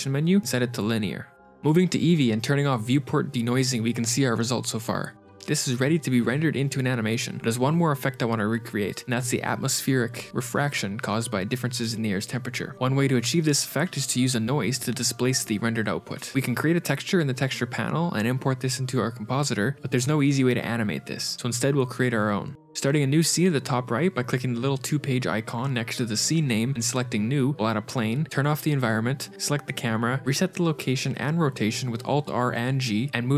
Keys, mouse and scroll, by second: 1.1 shift+space, 1.3 ctrl+shift+r, 1.3 z, 2.9 click, 3.5 click, 4.0 click, 4.6-5.3 scroll up 2, 5.3 shift+middle click, 13.5 click, 14.7 click, 15.6 click, 23.2 click, 26.6 click, 27.2 middle click, 27.6 a, 27.6 shift+c, 27.6 KP_Decimal, 28.2 click, 28.5 click, 31.3 click, 31.4 alt+g, 32.0 alt+r.